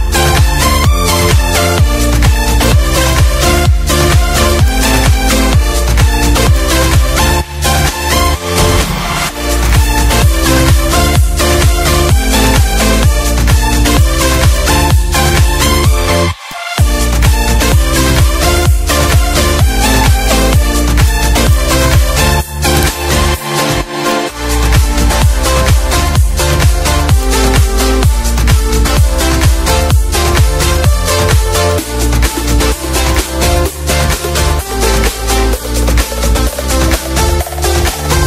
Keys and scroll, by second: 0.0 Right, 1.1 Left, 3.6 ctrl+d, 7.1 0, 8.4 space, 11.2 d, 12.8 Page_Down, 15.0 z, 16.1 F1, 17.8 ctrl+z, 20.6 ctrl+shift+a, 22.5 ctrl+shift+c, 23.4 F2, 24.5 Down, 29.9 F1, 34.4 4, 34.7 space, 36.2 z, 36.9 space, 37.8 F2.